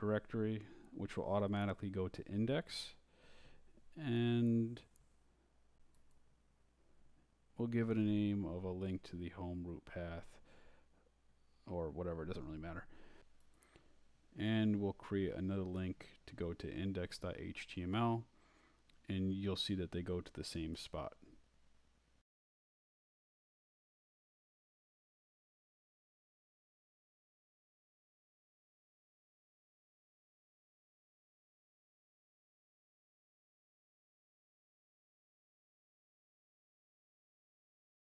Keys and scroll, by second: 1.4-6.5 typing, 8.1-13.5 typing, 15.1 Down, 16.1 shift+Down, 16.2 shift+,, 17.3-24.0 typing, 24.9 Left, 25.4 shift+', 25.8 shift+Right, 26.5-32.8 typing, 37.4 Escape, 37.8-38.1 typing.